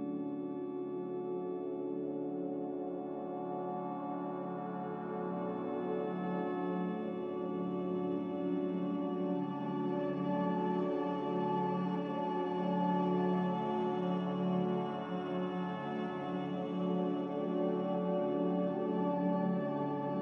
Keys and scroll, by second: 4.9 z, 6.9 Return, 10.2 typing, 15.7 typing, 15.9 Return.